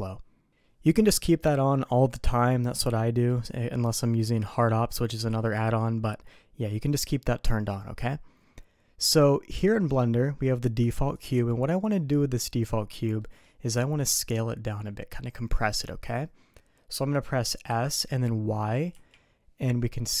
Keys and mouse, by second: 9.7 middle click, 11.1 click, 13.2 middle click, 17.7 s.